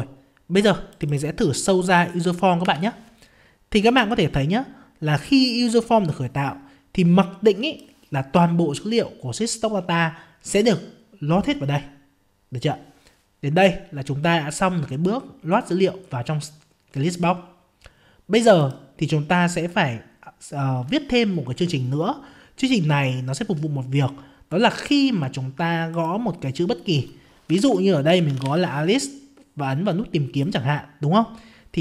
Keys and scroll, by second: 2.6 F5.